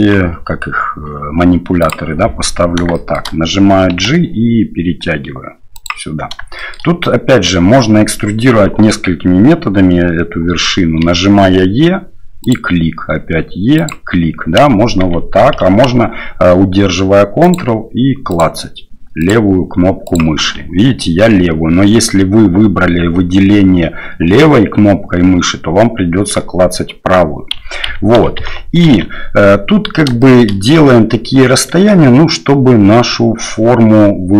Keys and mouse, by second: 1.9 click, 2.9 shift+middle click, 3.9 g, 6.6 shift+click, 11.0 e, 13.0 e, 15.0 ctrl+z, 18.3 ctrl+click, 20.1 ctrl+click, 27.8-29.0 ctrl+z, 30.2 shift+click.